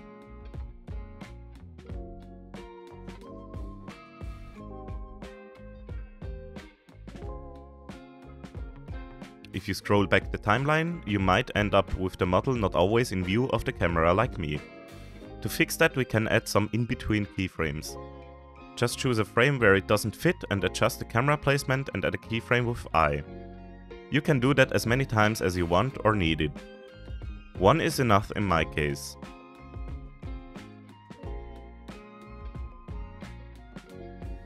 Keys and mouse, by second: 3.6 click, 4.8-7.8 drag, 7.8 i, 8.3 i, 10.8-16.1 drag, 16.6-17.8 middle drag, 18.5 middle click, 19.2 middle click, 19.5 click, 21.4-22.6 drag, 23.8-24.3 shift+drag, 28.4-29.3 drag, 29.5 click.